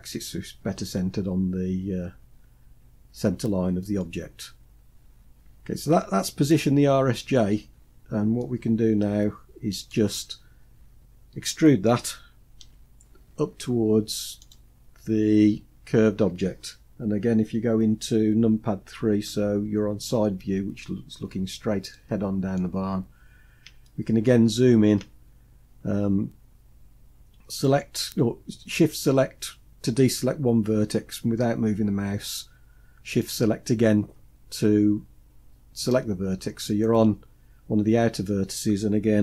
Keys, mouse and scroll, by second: 4.3-5.1 scroll down 5, 4.8 scroll up 1, 6.3-6.8 scroll down 1, 6.8-7.5 scroll down 5, 7.8-9.3 middle drag, 9.6-10.1 scroll up 2, 10.2-10.9 scroll up 1, 12.0 e, 18.6 KP_3, 20.1-21.3 scroll up 5, 21.3-22.3 shift+middle drag, 22.3-23.2 scroll up 3, 23.2 shift+middle click, 26.9 shift+click, 32.6 shift+click.